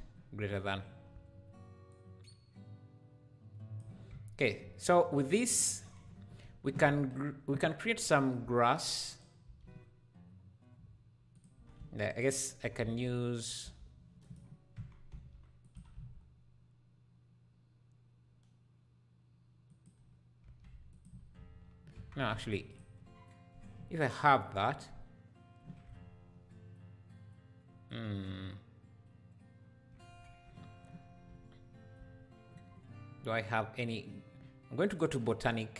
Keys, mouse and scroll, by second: 1.9-9.1 shift+drag, 5.5 scroll down 1, 6.5-6.9 scroll down 1, 9.1-11.4 shift+right drag, 9.4 shift+a, 11.4 shift+a, 11.6 r, 12.6 r, 12.7 r, 14.7 Tab, 15.1 s, 20.9 alt+click, 21.3 x, 21.9 Tab, 22.3 x, 22.7 click, 30.0 scroll up 1, 30.7 scroll up 1, 34.9 click.